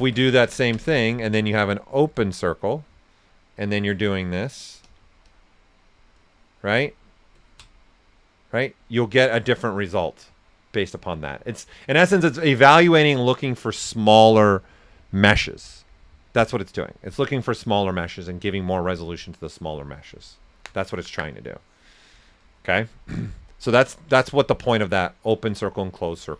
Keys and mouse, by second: 1.1 alt+right click, 2.3 click, 6.8 ctrl+click, 8.2 right click, 23.5 ctrl+right click, 24.1 ctrl+alt+right click, 25.1 shift+f, 26.2 ctrl+z.